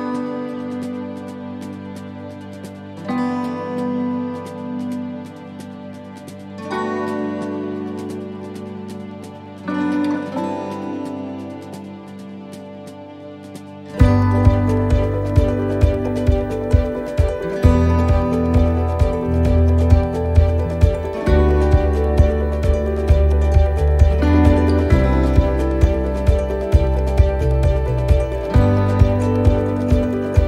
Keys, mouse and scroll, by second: 0.4 shift+right click, 0.8-1.5 scroll down 8, 2.7 shift+d, 4.7 click, 7.3 shift+middle click, 7.9-8.4 scroll up 5, 8.4 shift+middle click, 9.1 scroll up 2, 9.5 middle click, 10.0 shift+middle click, 10.6 middle click, 11.0 shift+middle click, 11.4-11.7 scroll down 2, 11.7 middle click, 12.7 right click, 13.7 shift+d, 15.0 click, 17.8 shift+middle click, 18.1 scroll up 5, 18.7 shift+middle click, 19.1 scroll up 2, 20.3 click, 23.1 middle click, 24.4 shift+middle click, 24.8 scroll up 2, 25.0-25.4 scroll down 4, 25.6 middle click, 26.5 right click, 27.6 click, 28.7-29.2 scroll up 2, 29.7 ctrl+r.